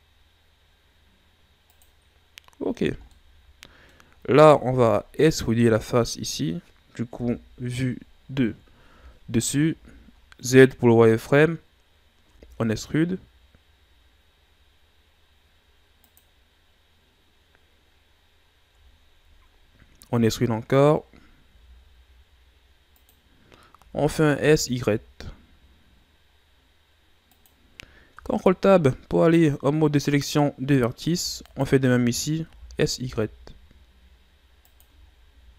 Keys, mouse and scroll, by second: 2.2-2.8 scroll down 1, 2.8 z, 3.1-4.1 middle drag, 4.1-4.6 scroll up 1, 4.6 ctrl+Tab, 5.8 right click, 7.1 KP_7, 8.1 ctrl+scroll up 8, 9.6 z, 12.2 e, 17.5-18.0 scroll up 2, 18.4-20.0 scroll down 1, 20.0 z, 21.4 e, 28.1 ctrl+Tab, 31.4 alt+right click, 32.4 s, 34.8 Tab, 35.1 scroll down 4, 35.3 a.